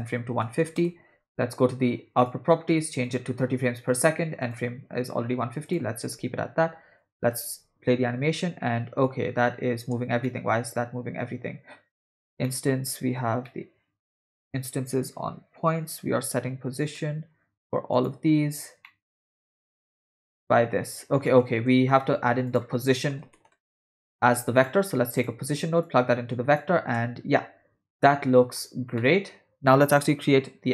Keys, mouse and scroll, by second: 2.2 click, 3.1-4.2 drag, 4.4-5.8 drag, 7.5 space, 9.9 space, 10.3-11.3 middle drag, 12.0 ctrl+middle click, 12.5 middle click, 13.5 middle click, 16.9 click, 17.9 click, 18.9 middle click, 20.3 click, 21.3 middle click, 21.8 shift+a, 25.8-26.6 drag, 27.0 space, 28.0-28.6 middle drag, 29.0-29.7 middle drag.